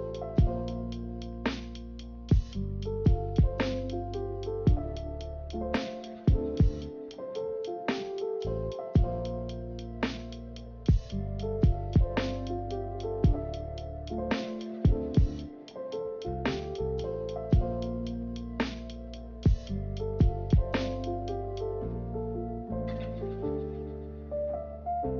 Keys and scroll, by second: 4.0 b, 7.3 m, 9.7 a, 16.2 ctrl+z, 16.4 ctrl+z, 24.3 ctrl+c, 24.5 ctrl+v.